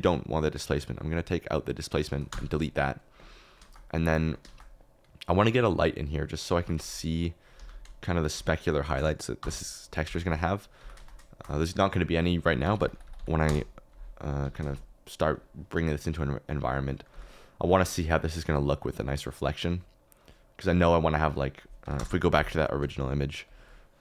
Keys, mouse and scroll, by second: 1.7 click, 2.3 typing, 3.6 shift+middle click, 4.4 shift+a, 6.5 g, 7.5 Escape, 8.8 shift+s, 10.0 g, 10.7 g, 11.0 shift+z, 12.9 0, 13.0 0, 14.4 g, 14.6 shift+z, 17.0 g, 19.0-20.1 drag.